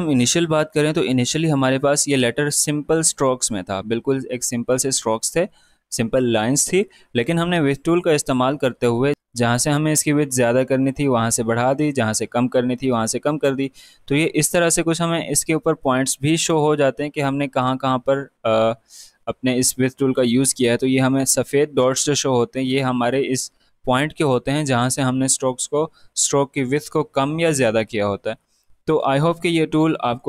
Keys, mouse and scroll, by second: 1.8 click, 2.8 space, 2.9 click, 3.2 space, 9.1-11.1 drag, 29.7 click.